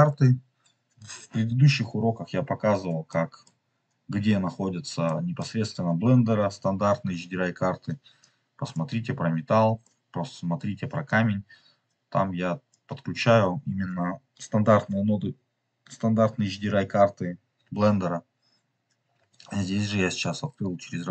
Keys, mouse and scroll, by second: 0.6-0.9 scroll down 2, 3.0 middle click, 4.9 middle click, 8.1-9.6 drag, 9.7 middle click, 11.0-12.7 drag, 20.9 scroll down 2.